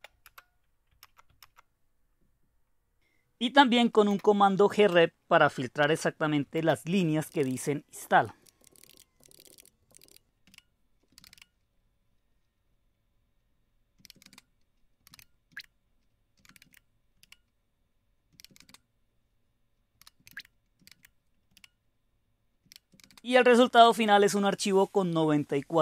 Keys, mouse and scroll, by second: 0.2 Return, 0.9 Up, 1.3 Up, 4.0 space, 5.5 shift+., 6.5-11.8 typing, 10.5 Return, 13.7-25.0 typing, 20.3 Tab, 21.5 Return.